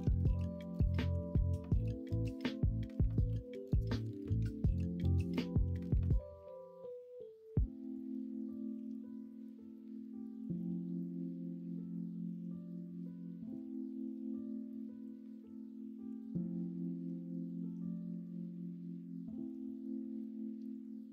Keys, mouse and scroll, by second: 1.1 r, 2.5 ctrl+z, 4.0 ,, 5.6 r, 8.7 s, 11.4 middle click, 15.5 middle click, 15.5 scroll up 1, 16.0 s, 17.7-19.2 middle drag, 17.7-19.2 scroll up 2.